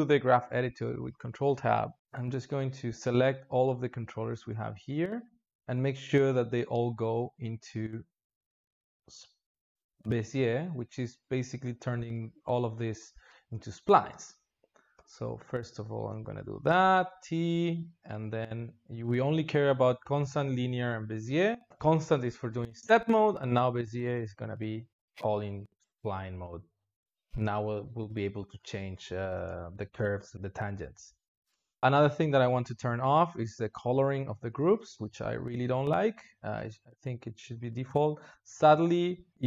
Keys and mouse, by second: 0.6 ctrl+Tab, 6.8-9.0 ctrl+middle drag, 9.0-11.0 drag, 11.0-13.2 ctrl+middle drag, 13.2 a, 13.4 a, 16.5 t, 25.4-25.8 drag, 25.8 space, 27.1 space, 28.7-29.2 drag, 29.2 space, 30.9 space, 34.4-36.3 middle drag, 36.3-39.3 drag.